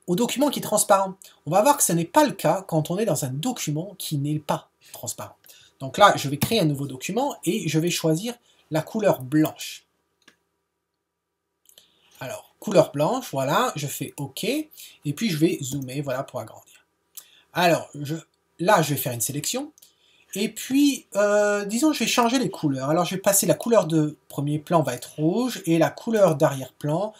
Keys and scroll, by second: 6.4 super+n.